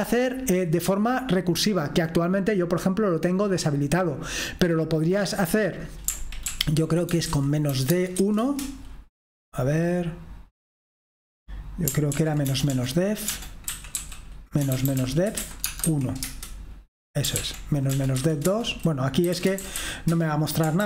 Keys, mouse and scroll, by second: 5.4 click, 5.7 click, 6.5 ctrl+p, 7.0-8.6 typing, 12.2 ctrl+p, 12.5-16.3 typing, 17.3 ctrl+p, 17.9-20.8 typing.